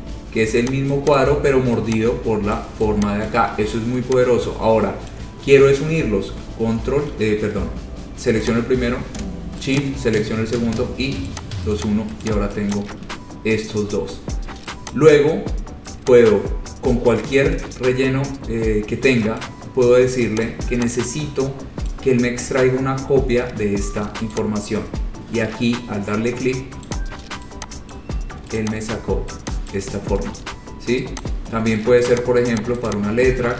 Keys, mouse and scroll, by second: 0.1 click, 0.9 click, 1.4 click, 2.8 click, 3.5 click, 5.3 click, 8.7 click, 10.0 shift+click, 11.5 click, 12.0 click, 12.1 shift+click, 12.5 click, 12.5 shift+click, 13.0 click, 13.1 shift+click, 13.3-14.7 scroll, 15.0 scroll down 6, 15.2 click, 18.8 scroll, 19.6 click, 20.5 click, 20.7 click, 22.1 click, 24.8 click, 25.1-25.6 scroll, 27.1 click, 27.3 scroll, 28.1 click, 28.9 click, 29.0-29.4 scroll, 29.9 click, 30.4-31.3 scroll, 31.5 click, 32.4 click, 32.7 click, 33.1 click.